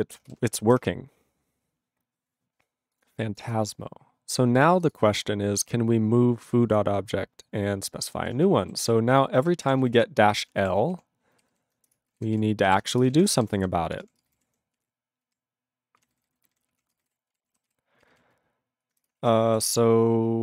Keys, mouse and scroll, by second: 4.9 click, 4.9 click, 5.4-6.9 scroll up 5, 8.2 alt+<, 8.8 ctrl+s, 9.4 ctrl+s, 9.5-10.4 typing, 10.8 ctrl+s, 10.9 ctrl+s, 11.4 ctrl+r, 11.5 ctrl+r, 11.9 Return, 12.4 ctrl+s, 12.7 ctrl+s, 13.0 Return, 13.3 ctrl+space, 13.4 ctrl+n, 13.6 ctrl+n, 13.9 ctrl+p, 14.0 ctrl+p, 14.2 ctrl+space, 14.3 ctrl+n, 14.4 ctrl+w, 14.5 ctrl+n, 14.7 ctrl+e, 15.2 ctrl+a, 16.0 ctrl+e, 16.1 ctrl+n, 16.3 ctrl+n, 16.4 ctrl+n, 16.5 ctrl+n, 16.7 ctrl+p, 16.8 ctrl+a, 16.9 ctrl+space, 17.0 ctrl+n, 17.1 ctrl+w, 17.3 ctrl+e, 17.8 ctrl+s, 18.0 ctrl+r, 19.1 Return, 19.3 ctrl+a, 19.6 ctrl+s.